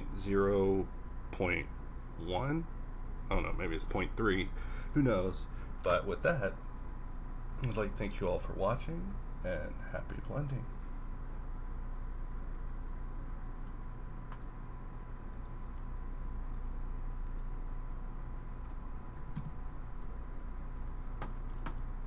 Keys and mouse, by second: 12.6-15.4 middle drag, 17.3-20.8 middle drag.